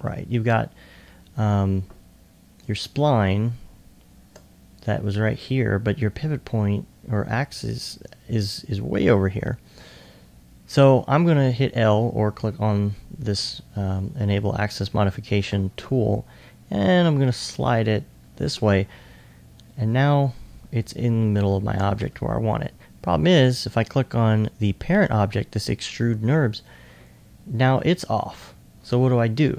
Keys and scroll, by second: 28.9 r.